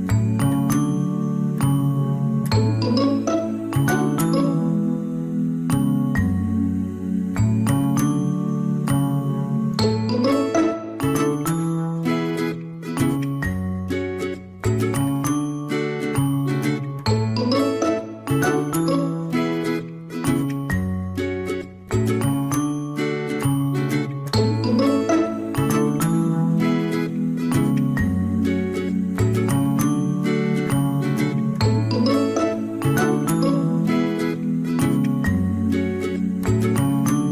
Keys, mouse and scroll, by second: 4.0 ctrl+-, 4.6 ctrl++, 4.7 space, 6.8 space, 16.4 ctrl+-, 18.8 ctrl+z, 20.2 ctrl+z, 20.7 right click, 23.5 ctrl+z, 28.1 ctrl++, 28.9 ctrl+-, 29.5 space, 36.6 ctrl+z.